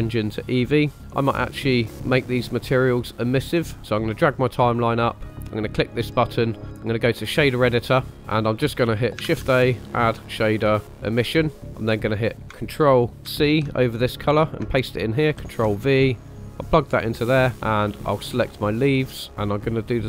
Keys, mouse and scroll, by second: 3.6 click, 5.3-7.3 drag, 8.1 middle click, 8.1 scroll down 2, 9.2 shift+a, 13.2 ctrl+c, 15.3 ctrl+v, 16.1-16.7 drag, 18.8 click, 19.4 click.